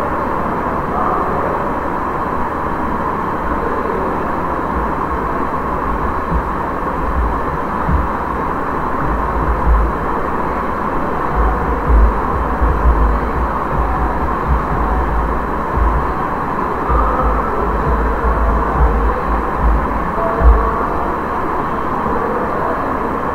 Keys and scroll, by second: 8.7-9.9 typing, 11.0-19.6 typing.